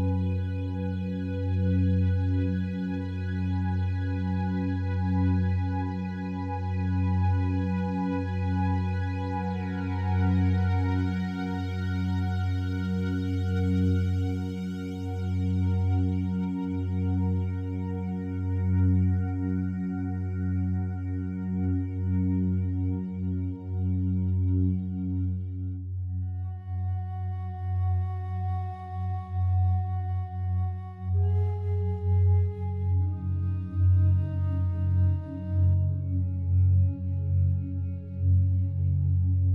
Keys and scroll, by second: 2.8 space, 5.0 ].